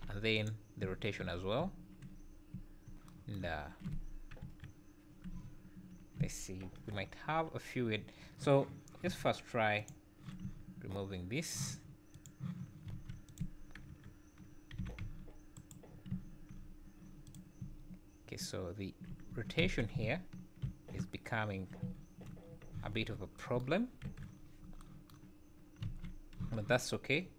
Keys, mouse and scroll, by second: 0.8-5.4 typing, 1.3 scroll up 1, 1.3 scroll down 1, 2.0 scroll up 3, 4.1 scroll down 2, 5.1 scroll up 2, 6.4 scroll up 1, 6.7 KP_1, 7.1-7.7 scroll up 3, 8.0-8.4 scroll down 6, 9.8 click, 10.5 `, 12.2 click, 12.9 alt+a, 13.3 click, 13.9 KP_1, 14.8 g, 15.9 scroll down 4, 16.1 `, 16.6-16.9 scroll up 5, 17.3 click, 17.6 `, 19.3 Tab, 19.6 a, 20.6 shift+n, 21.8 `, 22.5 scroll down 3, 22.7 z, 24.0 KP_1, 24.4 scroll up 4, 25.9 alt+a, 26.4 z, 27.2 scroll down 2.